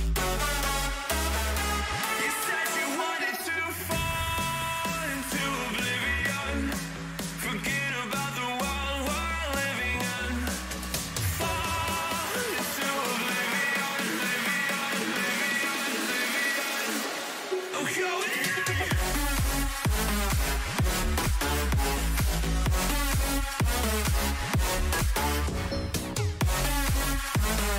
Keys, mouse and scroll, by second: 6.1-10.0 middle drag, 6.4 a, 9.5 b, 11.0 g, 15.7 a, 16.9 b, 19.0 g, 22.9 a, 24.8 ctrl+r, 26.4 a.